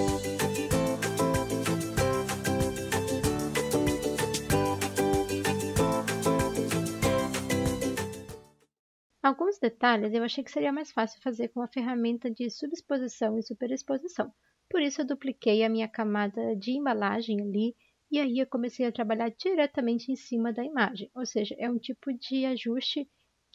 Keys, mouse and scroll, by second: 0.3 l, 0.6 ctrl+d, 0.6 l, 1.9 Escape, 5.2 g, 5.7 ctrl+d, 5.7 g, 6.9 l, 8.3-9.1 typing, 11.9 ctrl+j.